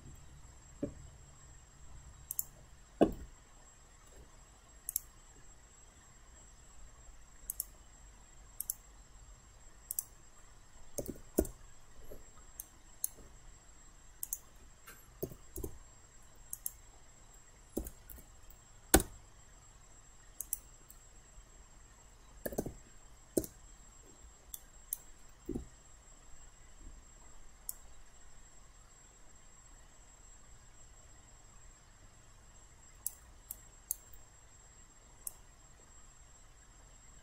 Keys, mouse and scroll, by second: 2.3 click, 3.6 alt+middle click, 4.9 click, 10.8-11.6 typing, 12.6 alt+right click, 14.2 click, 15.3 8, 15.6 Return, 16.6 click, 18.2 typing, 19.0 Return, 20.4 click, 22.2-23.1 typing, 23.4 Return, 24.6 alt+right click, 25.5 alt+w, 27.7-33.2 drag, 33.5 alt+right click, 35.3-37.2 drag.